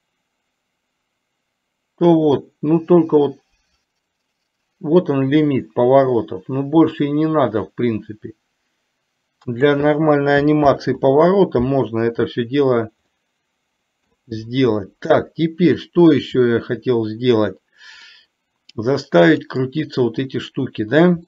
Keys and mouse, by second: 10.9 ctrl+z, 13.3-14.1 middle drag, 14.9 middle click, 18.1-18.9 middle drag, 19.4 click.